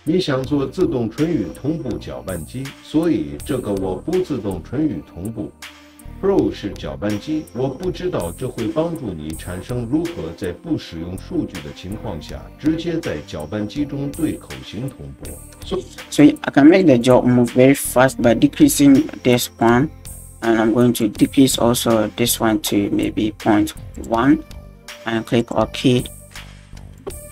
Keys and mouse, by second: 15.7 space, 16.1 click, 16.7 click, 17.0-26.4 drag, 27.0 click.